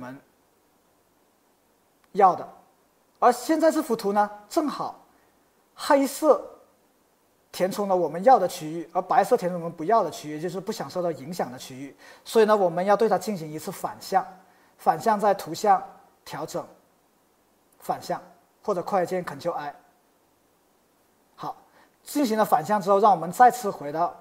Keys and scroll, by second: 4.9 super+z.